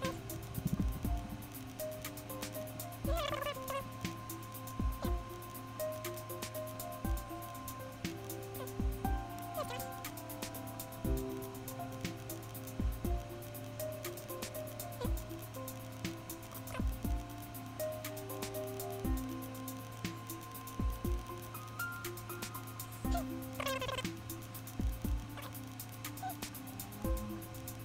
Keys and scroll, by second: 22.9 super+z.